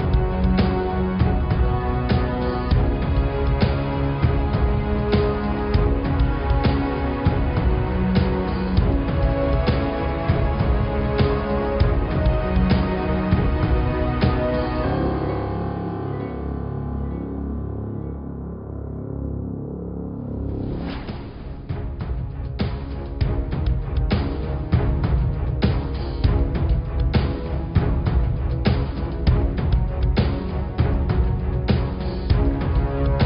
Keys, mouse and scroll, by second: 0.2-1.4 drag, 1.4 BackSpace, 1.4 BackSpace, 3.7 click, 4.2 click, 6.1 Tab, 7.0 Tab, 9.2 click, 11.4 click, 12.3 click, 13.4-14.8 drag, 14.8-15.1 scroll up 2, 15.3 click, 16.1 Tab, 16.4 click, 17.4 click, 18.0 alt+click, 18.4 alt+click, 20.1 click, 22.4 click, 24.2 click, 27.2 click, 27.5 Tab, 28.0 click, 30.0 click, 30.3 Tab, 30.5 click, 33.0 Tab.